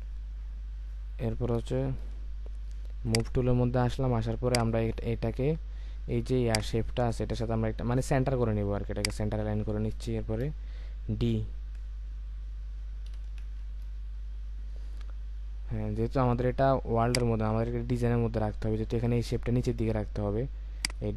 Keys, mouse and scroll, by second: 6.5 ctrl+click, 13.1 ctrl+d, 14.0-14.5 alt+scroll down 1.